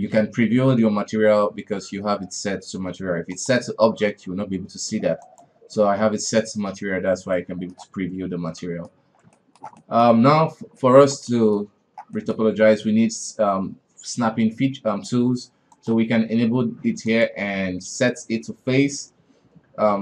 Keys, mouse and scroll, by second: 7.3-8.1 middle drag, 8.1 space, 8.6-9.0 middle drag, 9.0 scroll up 1, 9.3-11.8 shift+middle drag, 11.8-12.1 scroll down 2, 12.1-15.1 middle drag, 15.7 click, 17.1-20.0 drag.